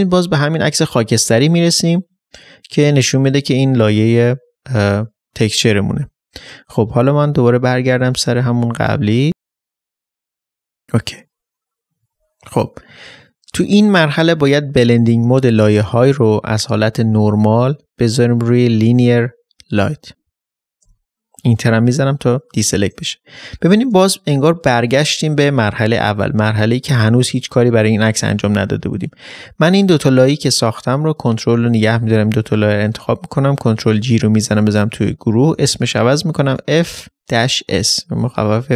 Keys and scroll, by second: 36.7 shift+s, 37.7 Return.